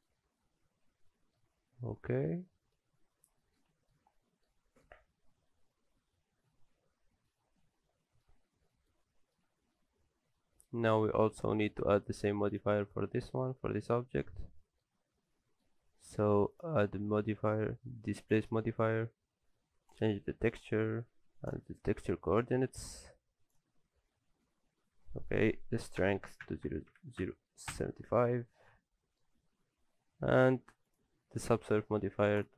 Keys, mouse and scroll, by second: 0.3 scroll down 1, 0.4 middle click, 3.0-3.4 scroll down 5, 3.4 middle click, 3.7 shift+middle click, 4.1-4.5 scroll down 2, 4.3 middle click, 4.5 shift+middle click, 5.0-5.7 scroll up 1, 5.7 middle click, 5.7 scroll up 4, 7.3-7.9 scroll down 5, 7.9 shift+middle click, 8.3-8.9 scroll up 2, 8.7 middle click, 9.0 shift+middle click, 10.1-10.4 scroll down 5, 10.4 shift+middle click, 10.8-11.1 scroll up 1, 11.4 middle click, 11.4 scroll up 6, 11.7 shift+middle click, 12.5 click, 12.8-13.2 scroll up 2, 13.2 middle click, 13.6-13.9 scroll down 2, 14.3 scroll down 7, 14.6 middle click, 14.9-15.5 scroll up 6, 15.5 middle click, 16.5 click, 19.9 click, 25.3 click, 26.5 KP_0, 28.7-29.1 scroll up 2, 28.9 middle click, 30.9 click.